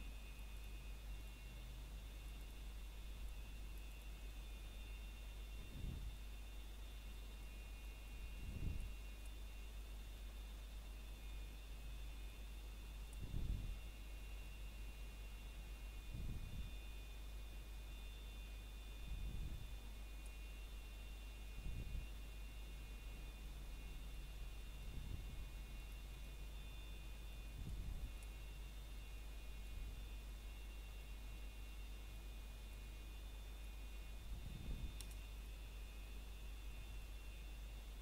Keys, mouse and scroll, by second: 0.7 scroll down 1, 0.8 shift+middle click, 1.1 scroll up 1, 2.3 click, 4.8 s, 6.6 click, 9.6 scroll down 1, 9.9 shift+middle click, 11.1 e, 13.8 click, 14.9 s, 16.1 click, 16.5 scroll down 1, 16.8 shift+middle click, 16.9 scroll up 1, 19.5 e, 20.9 click, 21.2 scroll down 1, 21.6 shift+middle click, 21.9 scroll up 1, 24.3 e, 25.5 click, 26.3 s, 27.3 click, 28.9 s, 29.8 click, 30.9 scroll up 1, 31.7 click, 32.2 shift+click.